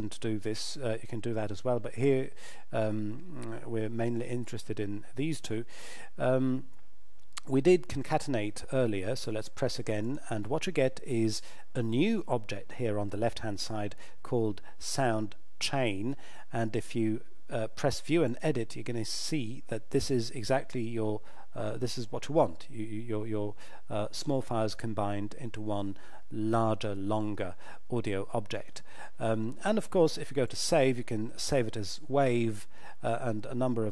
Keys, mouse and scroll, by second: 10.0 click, 18.3 click, 28.5 click.